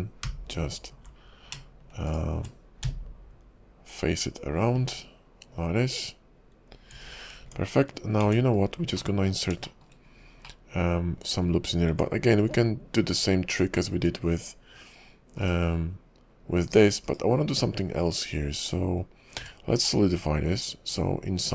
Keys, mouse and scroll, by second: 0.2-1.0 4, 1.6 4, 2.1 shift+click, 2.8-6.9 f, 7.2 scroll down 4, 7.5 Tab, 8.2 Tab, 8.7-9.1 scroll up 4, 9.1 middle click, 9.8 shift+middle click, 10.3-10.6 scroll up 1, 10.6 middle click, 11.9 Tab, 15.4 /, 17.1 /, 17.7-18.1 scroll up 2, 19.4 q.